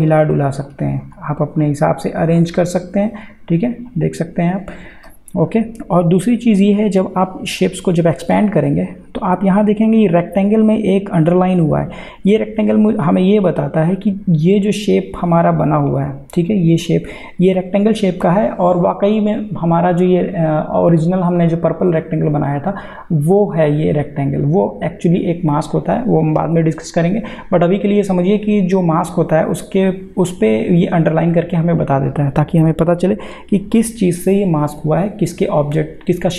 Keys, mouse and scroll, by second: 7.6 click, 15.9 click.